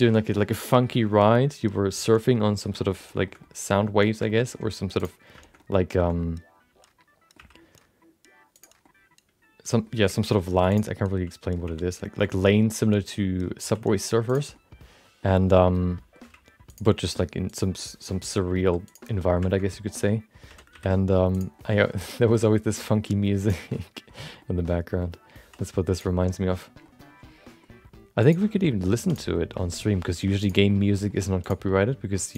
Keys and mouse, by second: 2.5 middle click, 2.8 shift+middle click, 3.0 middle click, 3.2 shift+middle click, 3.4 middle click, 4.2 shift+middle click, 4.4 middle click, 5.0 click, 5.4 shift+middle click, 5.5 middle click, 6.1-8.6 middle drag, 7.3 e, 8.9-9.9 middle drag, 10.3 ctrl+z, 10.7 click, 10.9 middle click, 12.5-13.5 middle drag, 13.6 e, 14.6 middle click, 15.5 middle click, 16.2 g, 16.9 r, 17.8 middle click, 18.6 g, 19.1 middle click, 19.5 middle click, 20.5 r, 21.6-22.7 middle drag, 22.8 g, 23.8 middle click, 24.4 middle click, 25.0 middle click, 25.4 e, 26.3 middle click, 26.9 middle click, 27.6 g, 28.6 middle click, 29.1 click, 29.3 middle click, 30.0 g, 30.7 middle click, 31.4 click, 31.6 middle click, 32.2 shift+click.